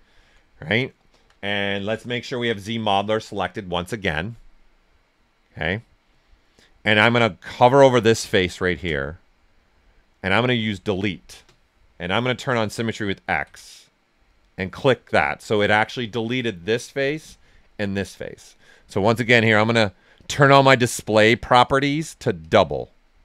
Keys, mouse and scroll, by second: 0.9 alt+right click, 1.5-2.8 typing, 8.8 space, 10.6 click, 11.0 space, 12.0 x, 12.6 ctrl+right click, 14.2 click, 14.8-19.0 alt+right drag, 19.0-22.4 drag, 22.4 click.